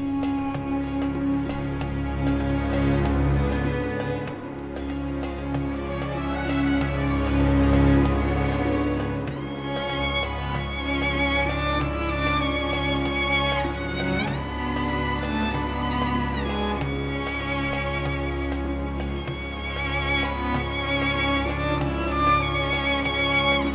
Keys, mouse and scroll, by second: 1.4 click, 5.4 click, 8.0 click, 8.9 click, 10.1 click, 11.6 m, 14.1 m, 15.6 click, 16.4-16.7 scroll up 2, 16.9 Escape, 17.7 click, 19.3 click, 20.0-20.4 scroll down 2, 21.2 scroll up 2, 22.1 click, 22.8 click.